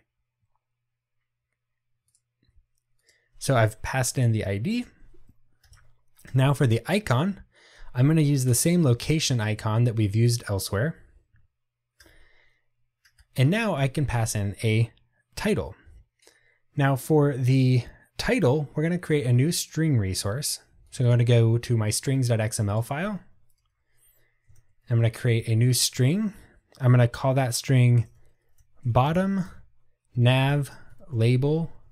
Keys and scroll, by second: 6.4 Return, 13.9 Return, 25.7 Tab.